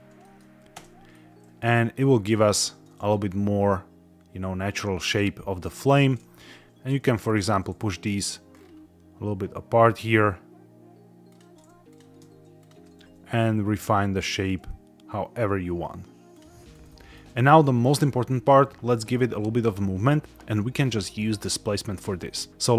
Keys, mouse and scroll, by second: 0.1 shift+middle click, 0.6 Tab, 1.0 middle click, 2.4 z, 5.7 scroll up 1, 5.8 Tab, 7.1 shift+click, 7.6 s, 7.7 x, 8.4 scroll up 3, 11.2 click, 11.8 click, 12.5 shift+click, 12.8 s, 12.9 x, 13.5 scroll down 2, 16.2 click, 16.6 click, 16.7 Tab, 16.8 middle click, 17.3 shift+middle click.